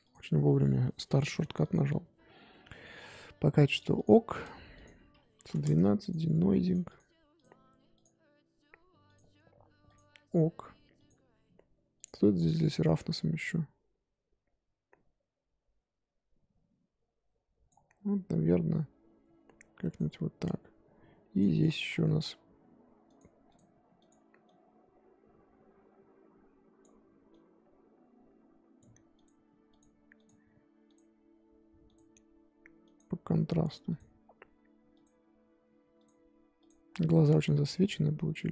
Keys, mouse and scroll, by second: 0.0 click, 1.6 click, 3.9 click, 4.7-6.7 drag, 6.8-8.0 drag, 9.0 click, 9.8 click, 10.9 click, 11.9 click, 12.9-15.9 drag, 19.2-21.3 drag, 21.6 scroll down 1, 23.0-24.0 drag, 24.5-29.8 drag, 30.1-38.5 drag.